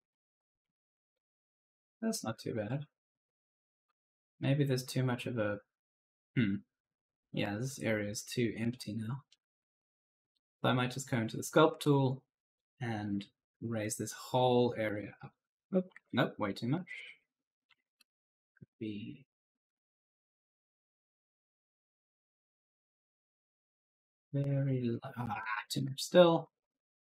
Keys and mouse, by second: 0.0-3.5 typing, 10.5 click, 12.4 click, 14.8 click, 15.8 ctrl+z, 16.7 click, 17.3-18.1 typing, 19.2 click, 24.8 click, 25.2 ctrl+z, 26.5 ctrl+z.